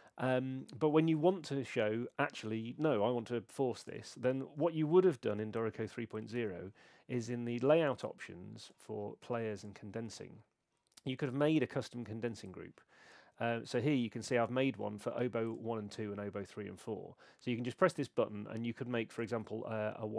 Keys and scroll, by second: 6.3 shift+super+l.